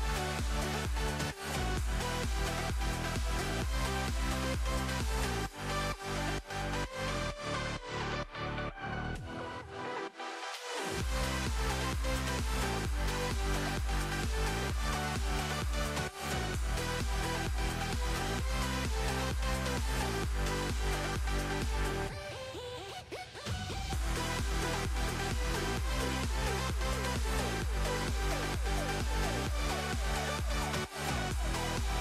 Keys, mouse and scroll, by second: 1.1-2.4 drag, 2.4 ctrl+KP_0, 3.1 click, 3.8 click, 4.6 click, 8.5 click, 9.5 click, 10.2 click, 10.6 click, 11.3-12.3 drag, 12.7-13.7 drag, 14.3 click, 14.5 click, 14.6 click, 15.1 click, 15.6 click, 16.1 click, 16.5 click, 16.9-17.9 drag, 18.1 click, 18.5 click, 19.4-20.4 drag, 20.6 click, 21.6 click, 22.1 space, 22.5 click, 22.8 click, 22.9 click, 23.2 click, 23.6 click, 24.1 click, 24.3 KP_0, 24.5-24.8 middle drag, 24.8 scroll up 2, 25.0 shift+middle click, 25.8 click, 27.7-28.0 scroll down 1, 28.0 middle click, 28.9 click, 29.2 shift+d, 30.0 s, 30.6 click.